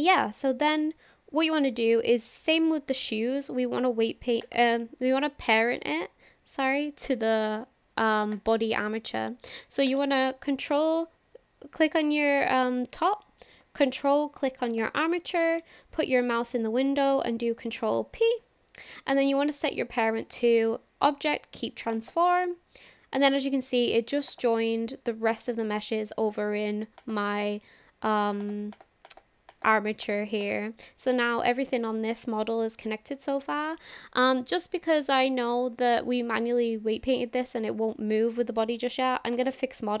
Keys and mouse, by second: 4.4 click, 14.7 ctrl+click, 17.9 ctrl+p, 24.3 click, 28.4 click, 28.7 click, 29.1 click, 29.5 click, 30.0 click, 30.4 click, 39.3-40.0 drag.